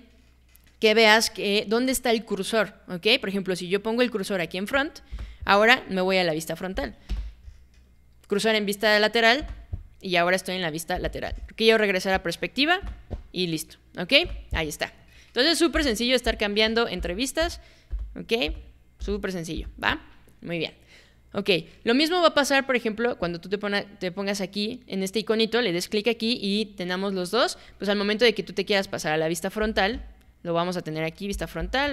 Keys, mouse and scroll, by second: 5.1 space, 7.1 space, 9.4 space, 10.9 space, 12.2 click, 12.8 space, 14.2 space, 15.7-19.6 typing, 23.2 click, 29.6 space, 31.6 space.